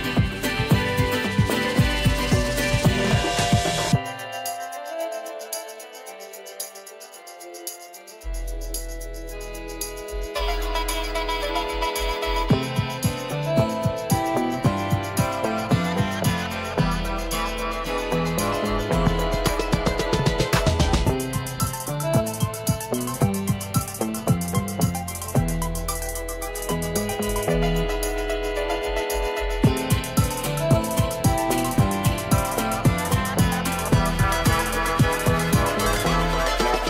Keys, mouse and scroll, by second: 11.1 space, 11.4 click, 11.7-12.0 space, 12.8-17.2 drag, 32.4 space, 32.7 click, 32.9-33.3 space, 33.8-36.3 drag.